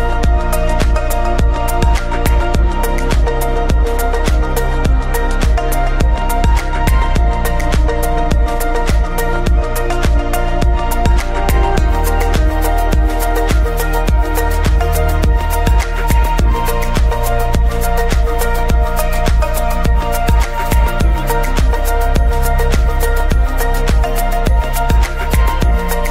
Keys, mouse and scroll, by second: 1.9-2.9 middle drag, 2.9-4.3 drag, 4.3-4.6 scroll down 1, 4.6-9.4 middle drag, 9.4 ctrl+shift+click, 11.2 scroll up 1, 12.0 scroll down 1, 12.2-12.5 middle drag, 12.5-12.8 scroll up 1, 13.8-14.6 scroll down 1, 18.2 click, 24.3-26.1 drag.